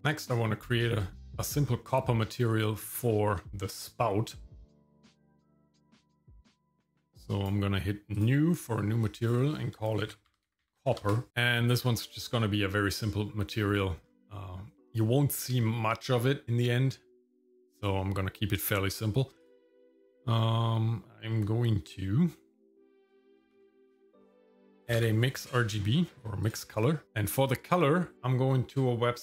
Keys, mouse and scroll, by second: 0.0 click, 0.3 shift+middle click, 1.2-1.8 scroll up 5, 2.6 middle click, 3.0-3.6 scroll up 3, 3.4 shift+middle click, 4.3-6.5 middle drag, 6.5-7.5 drag, 8.1 click, 9.2-11.0 drag, 10.6 p, 11.4 middle click, 11.4 scroll up 4, 13.4 middle click, 14.0-14.8 scroll down 1, 16.4 scroll down 1, 16.7 middle click, 19.4 click, 23.5 shift+a.